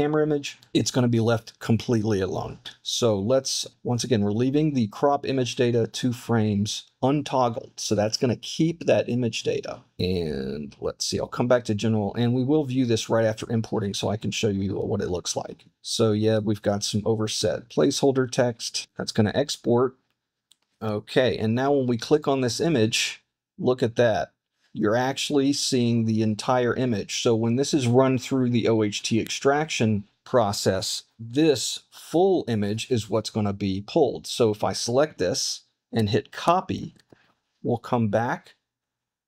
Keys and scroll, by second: 36.4 super+c.